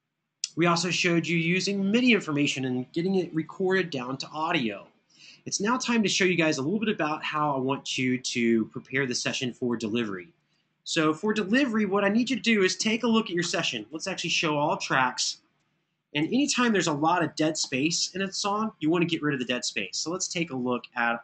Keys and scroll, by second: 11.3 super+=, 12.6 super+=, 17.3 super+[, 17.6 super+[.